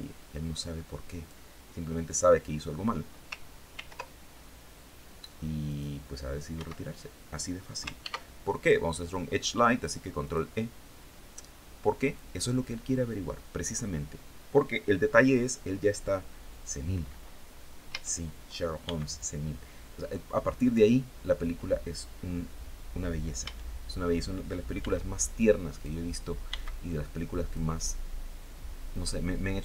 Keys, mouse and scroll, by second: 3.2 ctrl+r, 5.1 click, 6.0 Escape, 7.5 ctrl+e, 9.7 click, 11.5 click, 17.3 a, 18.3 b, 18.6-20.4 drag, 22.8 a, 24.2 b, 24.8 click, 25.9 b, 26.1-27.2 drag.